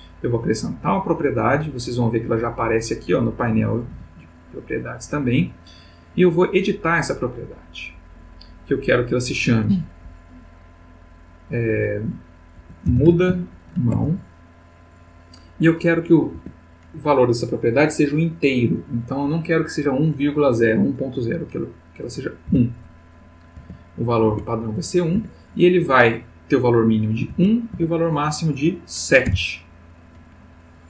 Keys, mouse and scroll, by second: 3.5 n, 7.6 click, 9.0 click, 12.5-13.9 typing, 16.3 Tab, 22.5 1, 23.5 Tab, 24.3 1, 25.1 Tab, 27.2 1, 27.7 Tab.